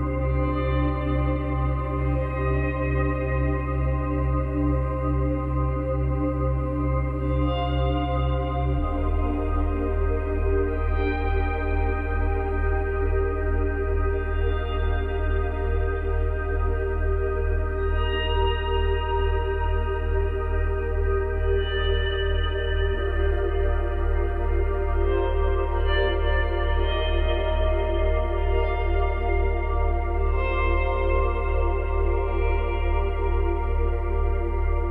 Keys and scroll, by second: 17.1 ctrl+z, 22.7 space, 24.3 space.